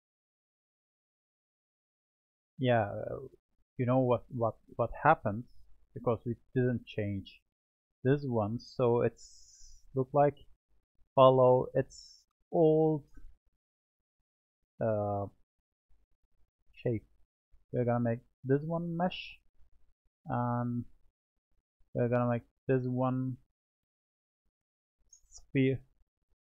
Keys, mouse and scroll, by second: 0.0 click, 2.6-4.0 middle drag, 4.0-5.5 drag, 5.5-6.8 scroll up 2, 6.8-7.4 scroll up 1, 7.4-8.1 drag, 8.1-8.9 middle drag, 8.9-11.9 scroll up 1, 12.6-13.5 middle drag, 13.5-15.1 scroll down 5, 15.1-19.5 drag, 19.5-21.2 middle drag, 21.2-22.4 drag, 23.4-26.4 drag.